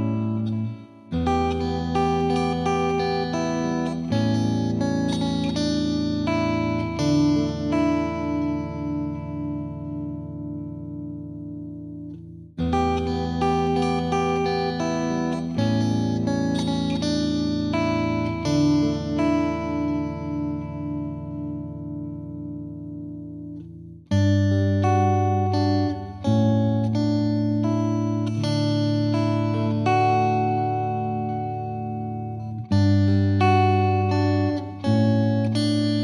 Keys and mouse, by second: 0.3 F2, 0.7 click, 1.4 click, 1.9 click, 3.3 click, 5.3 click, 5.6 click, 6.6 click, 7.0 click, 7.9 click, 9.0 click, 9.1 click, 9.5 click, 9.9 click, 10.4 click, 11.0 click, 11.5 click, 12.1 click, 13.5 click, 15.2 click, 16.1 click, 16.6 click, 17.2 click, 17.9 click, 19.8 right click, 20.1 click, 20.7 click, 21.9 click, 23.0 click, 23.7 click, 24.4 click, 24.9 click, 25.7 click, 26.3 click, 26.6 click, 27.0 click, 27.4 click, 27.9 click, 28.4 click, 28.8 click, 30.5 click, 30.9 click, 31.5 click, 32.5 click, 32.8 click, 33.4 click, 33.7 click, 33.9 click.